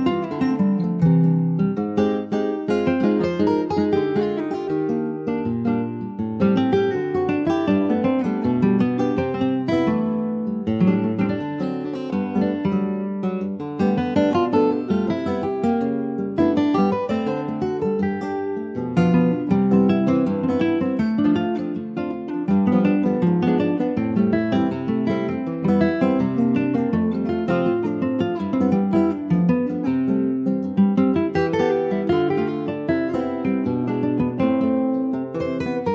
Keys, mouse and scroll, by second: 8.3-10.0 scroll up 2, 10.0 ctrl+a, 11.3 ctrl+s, 12.0 alt+z, 12.7 shift+middle click, 13.2 click, 16.3 s, 18.3 s, 26.6-27.1 scroll down 2, 27.1 shift+middle click, 27.8 ctrl+s, 28.0 click, 29.1-30.2 shift+middle drag, 30.2 click, 31.8 alt+z, 32.2 middle click, 32.9 ctrl+s, 33.1-35.1 middle drag, 35.1-35.9 drag.